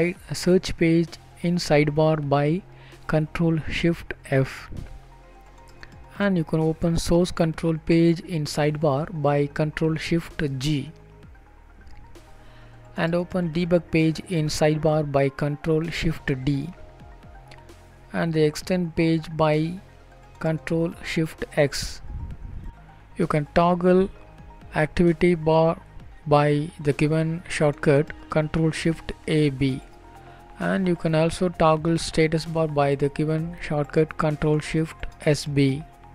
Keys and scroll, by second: 7.7 ctrl+shift+d, 10.5 ctrl+shift+x, 14.8 ctrl+b, 16.2 ctrl+b, 17.8 ctrl+b, 23.3 ctrl+shift+e, 24.5 ctrl+b.